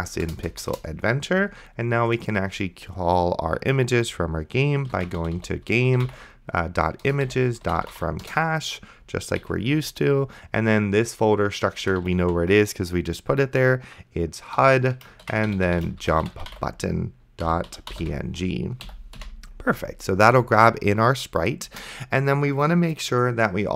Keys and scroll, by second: 0.0-0.9 typing, 4.6-9.4 typing, 12.1 shift+h, 12.4 u, 14.6-19.2 typing, 18.9 End, 21.7 Return.